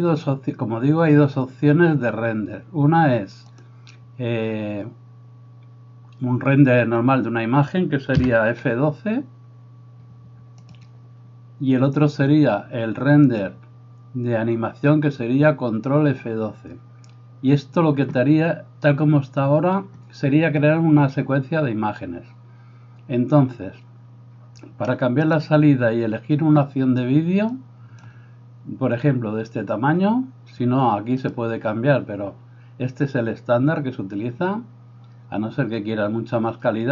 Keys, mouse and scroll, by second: 8.7 F12, 27.7-36.9 drag.